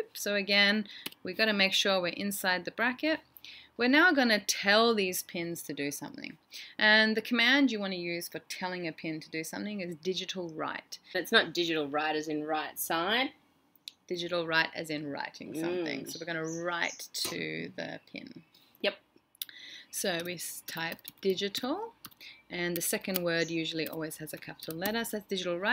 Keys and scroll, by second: 11.5-12.0 typing, 19.6 typing, 24.1-24.8 typing.